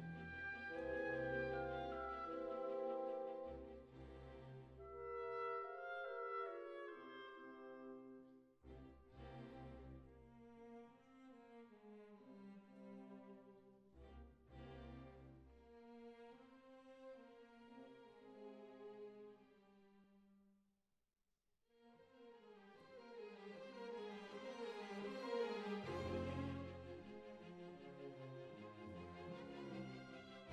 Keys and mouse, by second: 2.0 r, 3.0 s, 3.8-6.3 drag, 5.0 right click, 6.7 ctrl+r, 7.1 right click, 8.4 click, 9.3 click, 10.0 click, 10.9 right click, 11.1 ctrl+r, 11.6 right click, 12.6 click, 12.9-14.7 middle drag, 16.6 click, 16.9-18.2 right drag, 18.2 x, 19.1 click, 19.5 right click, 21.0-26.0 drag.